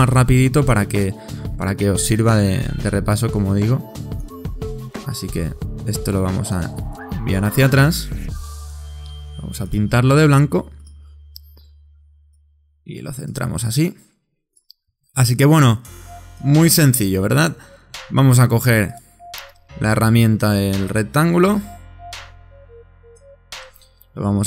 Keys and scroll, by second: 7.3 shift+super+9, 9.3 i, 16.9 Left.